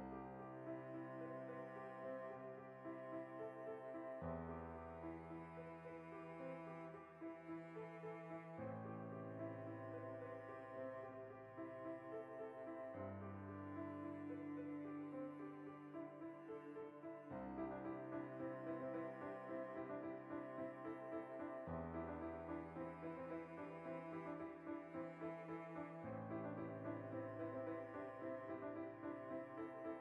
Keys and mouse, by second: 0.9 i, 1.4 click, 1.5 middle click, 2.2 right click, 2.5 l, 3.4 click, 3.5 middle click, 4.1 ctrl+i, 4.4 h, 4.5 middle click, 5.3 ctrl+r, 6.1 click, 6.3 ctrl+r, 6.8 click, 7.3 alt+h, 7.4-13.7 middle drag, 8.0 a, 8.8 a, 13.7 right drag, 13.9-15.0 middle drag, 14.4 Tab, 15.0 alt+right click, 15.3-18.2 middle drag, 15.6 g, 18.2 alt+right click, 18.3 shift+middle click, 18.8 alt+shift+right click, 19.0-22.2 middle drag, 21.0 ctrl+r, 22.2 ctrl+z, 22.7 alt+right click, 23.2 ctrl+b, 24.2 right click, 24.8 ctrl+r, 25.0 right click, 25.2 ctrl+r, 25.4 right click, 25.5-30.0 middle drag, 26.2 ctrl+z, 27.7 alt+q, 28.4 g, 28.7 right click, 28.9 z, 29.3-30.0 shift+right drag.